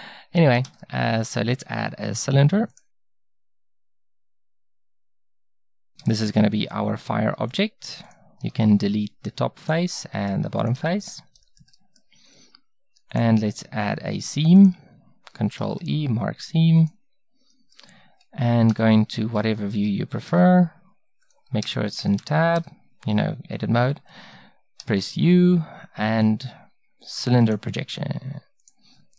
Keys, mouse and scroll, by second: 0.7 shift+a, 5.2 middle click, 6.0 Tab, 8.5 x, 10.8 x, 15.6 ctrl+e, 18.7 KP_1, 19.8 Tab, 20.3 a, 21.6 Tab, 22.6 a, 24.8 u.